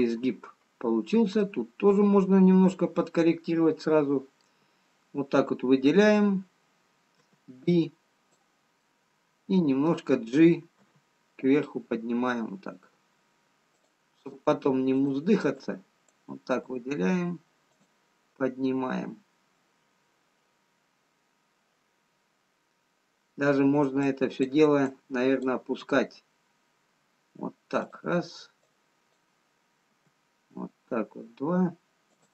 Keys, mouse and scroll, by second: 3.9 middle click, 7.7 b, 9.3 middle click, 11.7 g, 15.4 click, 16.0 click, 17.1 g, 24.5 click, 25.4 click, 26.3 g, 30.0 click, 30.4 g.